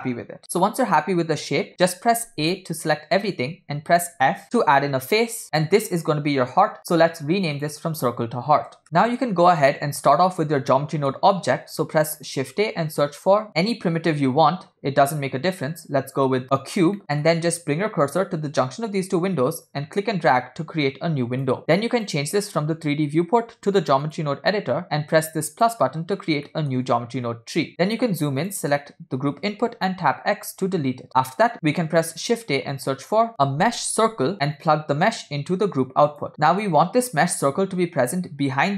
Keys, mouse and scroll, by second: 0.0 x, 0.5 click, 2.3 a, 4.3 f, 4.6 Return, 5.4 Tab, 7.8-8.9 drag, 8.9 scroll up 3, 9.3-10.1 middle drag, 10.2 scroll down 2, 10.8-11.2 middle drag, 12.5 shift+a, 17.0 middle click, 19.8-21.6 drag, 22.0-24.3 drag, 25.5 drag, 26.5 middle click, 26.9-27.7 scroll up 7, 27.7 middle click, 28.5 click, 30.2 x, 32.0 shift+a, 35.3 click, 36.3 middle click.